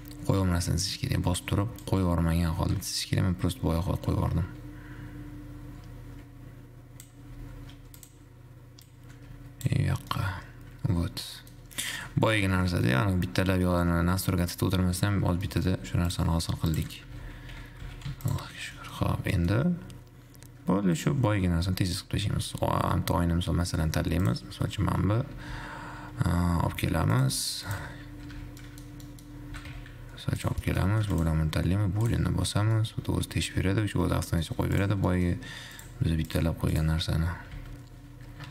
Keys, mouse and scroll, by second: 7.7 ctrl+shift+Tab, 10.3-15.5 middle drag, 15.5 Tab, 15.7 middle click, 16.2 2, 16.3 click, 16.7 2, 16.9 click, 17.2 g, 18.8 Tab, 19.2-19.7 scroll up 2, 19.7-21.2 middle drag, 21.2-24.2 drag, 25.7 g, 27.7 g, 28.7 `, 28.8 middle click, 29.7 g, 30.8-31.4 middle drag, 31.4 shift+click, 32.2-32.9 drag, 32.9 scroll down 1, 33.0-35.2 middle drag, 35.2 click, 35.3 middle click, 35.7-36.2 scroll up 1, 36.2 click, 37.0 click, 37.7 r.